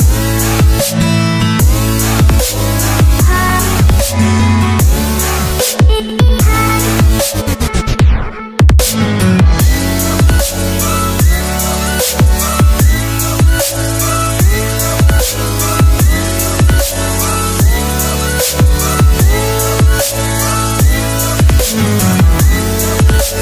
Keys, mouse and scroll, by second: 0.8 click, 0.9 Left, 2.6 Right, 3.5 click, 3.8 Delete, 4.9 Tab, 5.6 click, 6.3 Tab, 6.6 Tab, 8.3 right click, 8.8 Tab, 10.6 click, 11.6 Return, 12.1 click, 13.8 click, 17.0 Return, 19.5 Tab, 20.0 click, 21.5 ctrl+c, 21.7 Tab, 22.1 click.